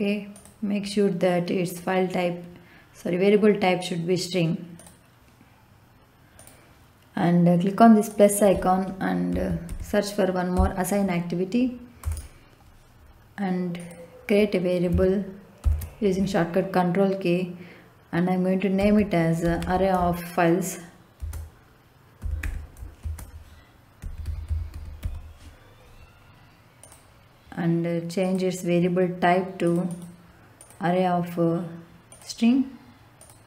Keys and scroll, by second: 9.3 a, 9.6 s, 10.5 i, 12.0 Return, 15.6 ctrl+k, 18.7 a, 21.1-24.9 typing.